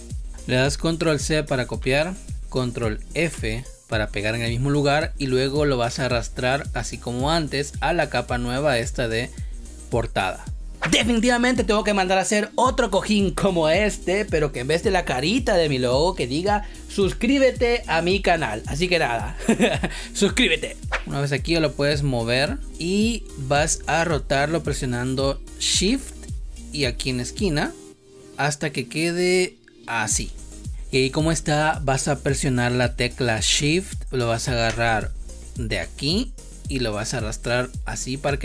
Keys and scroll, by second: 1.5 ctrl+c, 3.0 ctrl+f, 22.6 space.